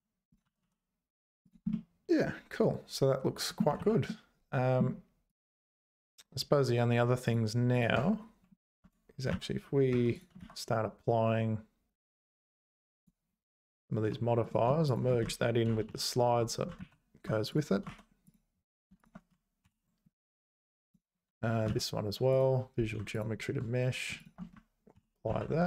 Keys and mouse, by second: 0.3 click, 0.4 g, 1.8-3.6 middle drag, 3.8 ctrl+z, 4.1 middle click, 7.2 click, 7.7 click, 8.0 Tab, 8.8 Tab, 9.3 ctrl+a, 10.1 click, 10.4 ctrl+a, 14.9 shift+click, 15.9 ctrl+j, 16.8 ctrl+z, 17.9 ctrl+a, 19.7 ctrl+j, 20.9 click, 21.7 ctrl+a, 24.2 shift+click, 25.0 ctrl+j, 25.3 ctrl+s.